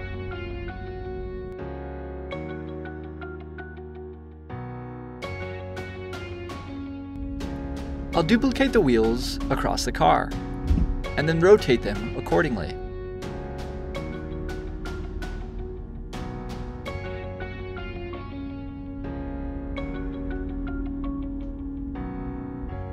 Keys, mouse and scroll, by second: 0.9 shift+click, 2.7 c, 3.6 v, 4.2-6.9 middle drag, 6.9 click, 20.7 click.